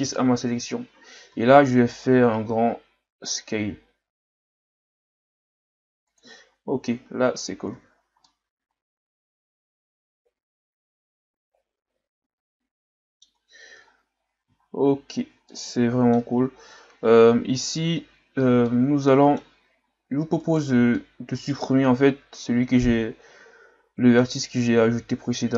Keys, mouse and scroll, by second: 1.3 s, 6.8 Tab, 7.3 a, 7.7 a, 7.9 scroll down 3, 8.2-11.3 middle drag, 13.9 scroll down 2, 14.1-14.5 scroll up 3, 14.5-14.9 shift+scroll down 5, 14.9-15.2 scroll up 2, 15.2 Tab, 15.5-18.5 middle drag, 18.6-20.4 middle drag, 20.4 alt+right click, 21.0-24.1 middle drag.